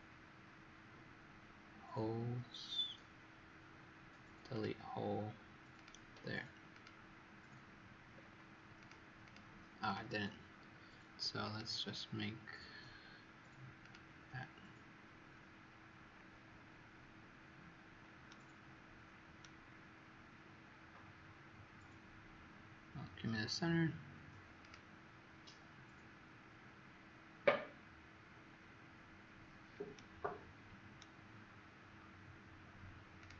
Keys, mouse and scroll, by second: 8.0-8.7 scroll up 4, 8.7 click, 9.2 click, 11.4 click, 18.2 right click, 24.6 click, 29.9 right click, 33.1 click.